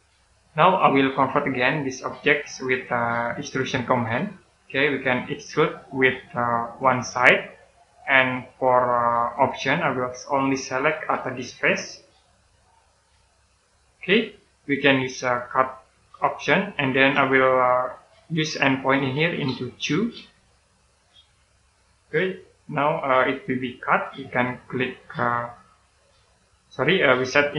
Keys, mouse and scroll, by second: 0.4 middle click, 2.2 click, 16.3 click, 19.8 2, 20.8 click, 21.9-22.3 scroll down 1, 22.3 middle click.